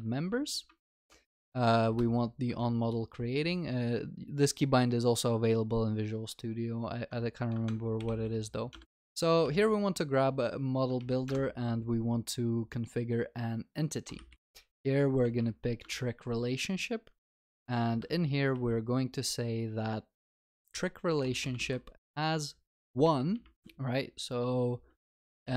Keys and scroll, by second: 1.1 Down, 8.7 Return, 15.8 Return, 23.5 Return, 24.3 Delete.